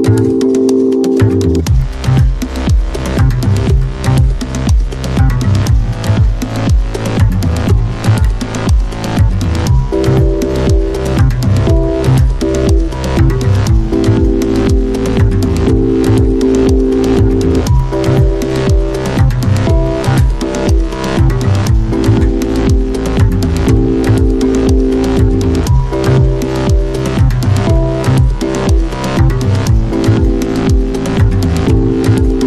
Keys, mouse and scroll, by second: 6.3 click, 6.3 typing, 10.0 typing, 12.2 click, 12.2 typing, 17.8-19.1 scroll up 1, 17.8 typing, 22.4-31.1 drag, 25.4 typing, 29.3 typing.